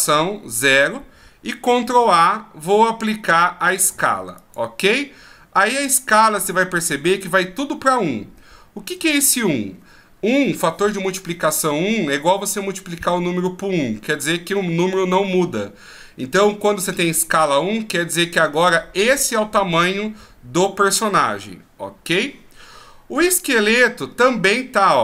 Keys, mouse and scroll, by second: 9.2-12.5 scroll up 2, 23.2 right click.